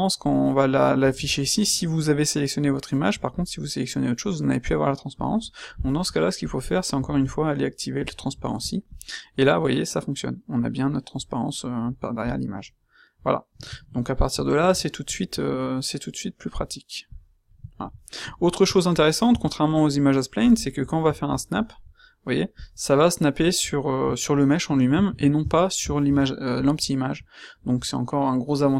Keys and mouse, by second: 3.3-4.3 middle drag, 17.1-17.6 drag, 17.6-18.9 middle drag, 18.9-19.2 right drag, 19.2 Tab, 24.9 ctrl+z, 25.4 Tab.